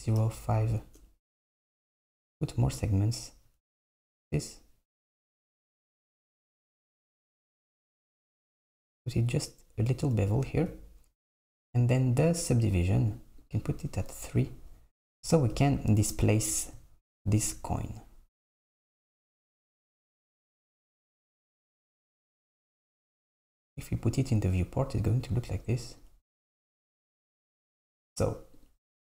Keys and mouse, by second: 2.5-8.6 drag, 11.5-15.3 drag, 15.4 s, 21.5 click, 26.0 click, 27.8-28.7 drag.